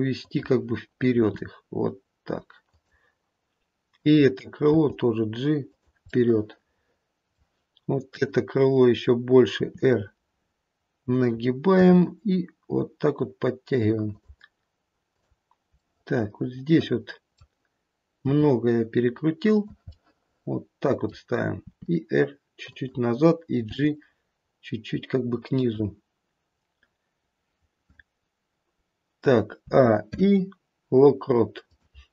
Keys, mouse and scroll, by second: 1.1 r, 3.9 click, 4.8 g, 6.0 middle click, 6.4 middle click, 8.0 click, 9.6 r, 11.8 g, 15.0 click, 15.8 middle click, 18.3 r, 19.8 middle click, 21.7 r, 23.6 g, 29.6 a, 30.0 i.